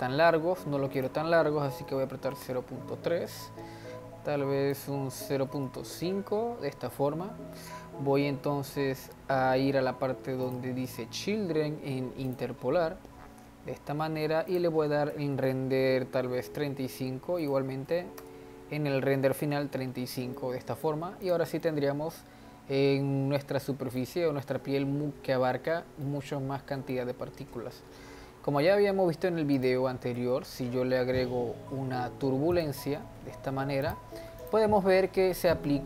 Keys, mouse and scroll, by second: 1.0-3.4 drag, 3.4-4.4 scroll up 1, 4.4 scroll up 1, 4.7-7.7 drag, 8.2-9.1 scroll down 2, 10.4-12.3 drag, 13.7 scroll down 3, 14.5-20.3 drag, 20.3-21.2 middle drag, 21.2 click, 21.6-24.5 middle drag, 24.5-25.2 scroll up 2, 25.2 scroll up 1, 25.5-26.0 scroll down 2, 26.0-28.1 middle drag, 28.1-29.5 scroll down 2, 29.5 click, 30.1 shift+a, 33.0 g, 34.4 click, 34.8-35.6 scroll up 2, 35.6-35.8 middle drag.